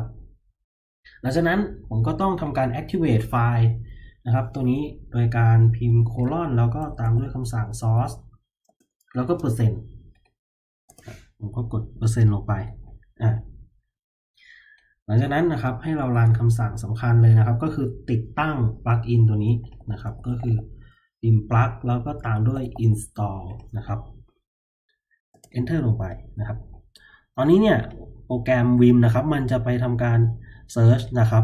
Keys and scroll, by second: 6.0-9.2 typing, 10.8 Return, 15.2 Return, 16.1 :, 19.5-22.9 typing, 25.3 Return, 26.2 typing, 28.0 typing.